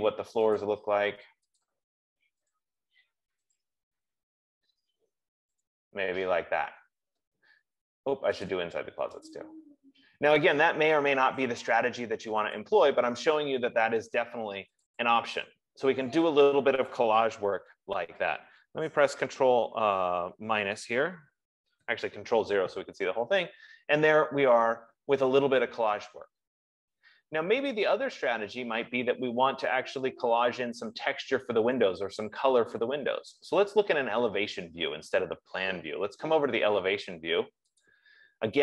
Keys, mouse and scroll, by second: 1.0 click, 2.0 click, 4.0 click, 6.2 click, 8.9 click, 9.7 click, 13.5 click, 15.4 click, 21.9 click, 22.2 ctrl+0, 35.2 F15, 38.2 click.